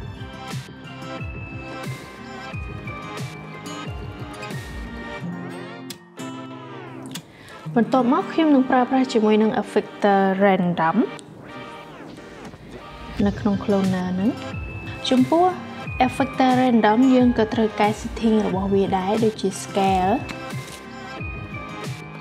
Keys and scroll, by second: 0.0-0.3 typing, 20.7-21.9 typing, 22.0 Return.